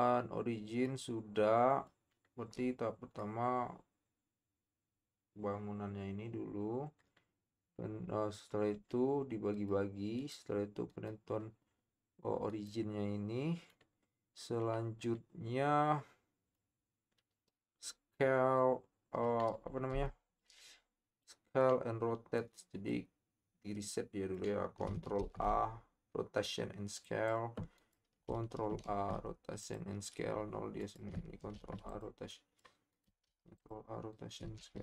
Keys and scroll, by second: 28.8 ctrl+a, 31.5 ctrl+a, 33.3 ctrl+a, 34.6 ctrl+a.